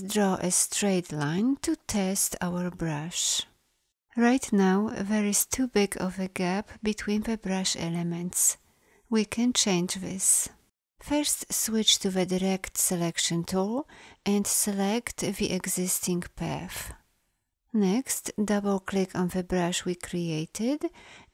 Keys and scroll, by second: 11.5 a.